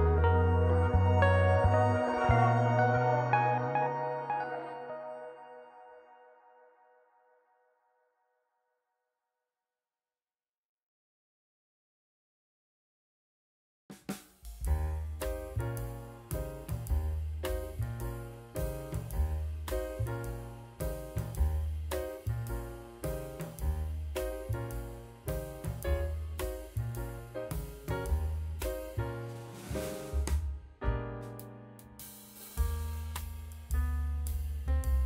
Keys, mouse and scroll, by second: 3.5-3.8 middle drag, 4.5-5.0 drag, 6.8 KP_7, 7.5-8.2 scroll down 2, 8.2-10.4 drag, 11.2-12.2 drag, 13.4-14.0 middle drag, 14.2-14.6 middle drag, 14.9-15.7 drag, 16.4-17.8 drag, 18.1-18.6 middle drag, 19.0 middle drag, 26.8 shift+s, 29.9 click, 30.4-31.0 middle drag, 31.3 middle click, 33.2 alt+h, 34.1-34.6 middle drag.